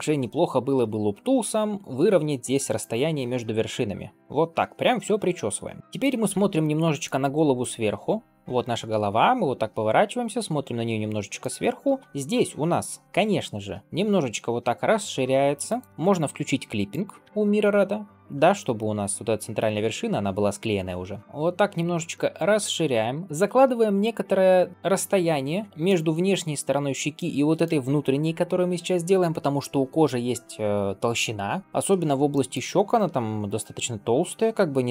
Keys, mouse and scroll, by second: 3.3-5.9 middle drag, 6.1-6.5 scroll up 1, 6.5 middle click, 7.1-7.5 scroll down 1, 7.5-11.3 middle drag, 11.5-13.8 scroll up 2, 16.0 ctrl+space, 16.8 click, 17.4 ctrl+space, 18.7 g, 22.0 middle click, 23.1 shift+middle click, 23.7-24.7 middle drag, 25.5 middle click, 25.7 middle click, 27.0 middle click, 32.2 shift+middle click.